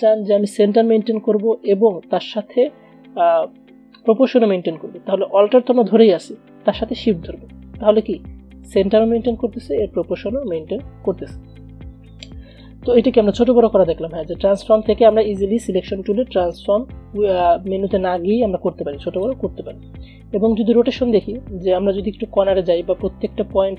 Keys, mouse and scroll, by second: 12.7 click, 18.5-19.8 drag, 19.8 ctrl+z.